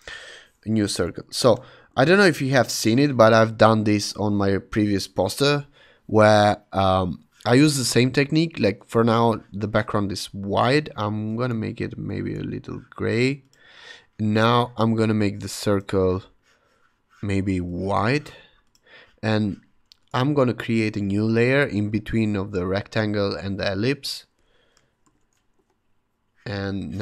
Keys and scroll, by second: 0.9 Return, 1.0 v, 1.9 shift+super+h, 25.0 shift+super+n, 25.5 Return.